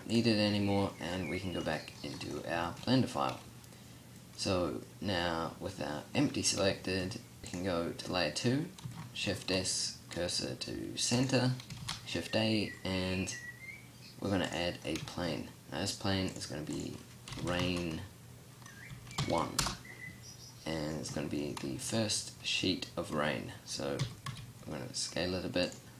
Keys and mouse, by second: 9.0 shift+s, 11.6 shift+a, 23.8 s, 25.8 s.